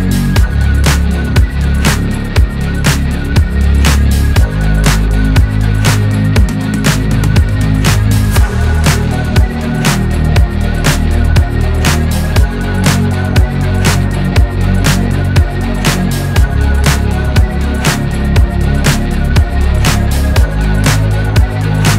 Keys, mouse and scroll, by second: 4.2 click, 5.8-6.9 drag, 7.6 click, 8.8-12.3 drag, 13.5 click, 14.8 middle click, 15.0 scroll up 2, 15.3-17.3 drag, 17.3 scroll down 1, 17.4 click, 17.6 scroll up 2, 17.8 middle click, 18.6 scroll down 5, 18.9 click, 19.1 middle click, 19.5-20.0 scroll up 7, 20.1-20.7 scroll down 3, 20.4 KP_1, 20.8 shift+middle click, 21.0-21.4 scroll up 2, 21.4 scroll down 1.